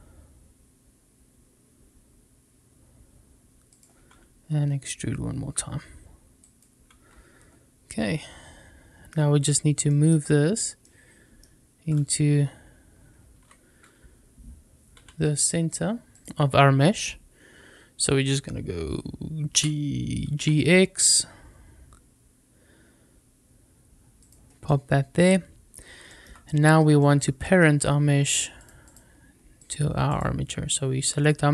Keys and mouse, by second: 3.6 click, 4.7 e, 6.3 click, 7.7-9.0 middle drag, 9.7 shift+middle click, 10.7-11.7 middle drag, 11.7 click, 12.2 s, 13.3 Escape, 14.8 a, 19.4 g, 20.2 x, 24.0 click, 24.5-25.6 middle drag, 25.9 shift+middle click, 26.3 middle click, 27.0 shift+middle click, 28.4-28.8 drag, 29.5-29.9 drag.